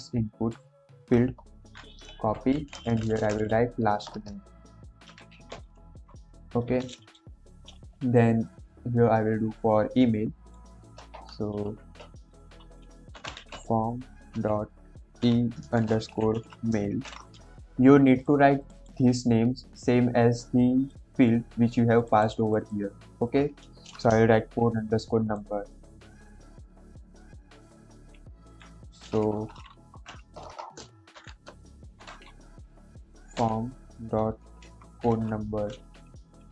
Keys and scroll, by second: 1.3 BackSpace, 1.5 ctrl+v, 2.0 ctrl+s, 2.3 Left, 2.5 Left, 2.6 Left, 3.7-5.9 typing, 6.0 Escape, 6.6 ctrl+s, 11.1 BackSpace, 11.4 shift+[, 13.0-14.2 typing, 15.4-16.9 typing, 24.3 ctrl+c, 29.2-33.5 typing, 34.8 ctrl+v, 36.0 ctrl+s.